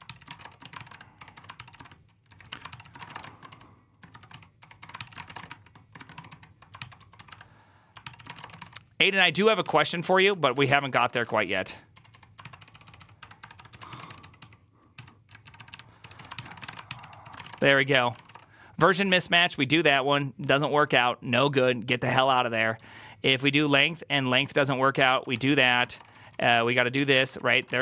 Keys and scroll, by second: 0.0-18.7 typing, 5.9 ctrl+^, 6.0 ctrl+o, 6.2 ctrl+o, 20.6 typing, 22.6 typing, 24.2-27.8 typing.